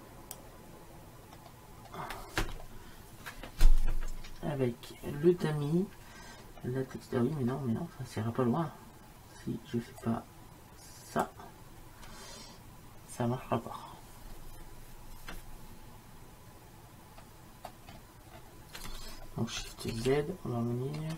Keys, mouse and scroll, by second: 0.1-1.2 drag, 1.5-6.7 middle drag, 7.5-10.1 middle drag, 10.1-11.8 drag, 17.3-20.3 middle drag, 20.3 shift+z.